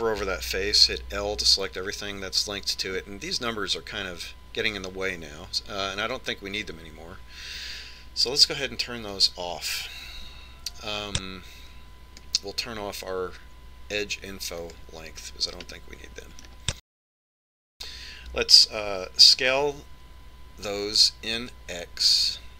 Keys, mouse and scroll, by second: 2.0 scroll up 1, 2.7 l, 11.1 click, 16.6 click, 17.8-19.5 middle drag, 20.2 s.